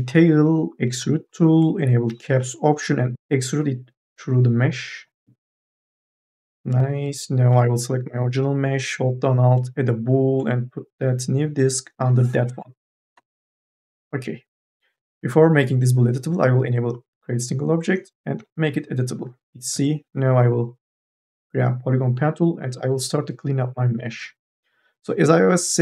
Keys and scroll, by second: 6.3 4, 6.6 e, 13.0 Delete, 18.2 c, 19.6 1.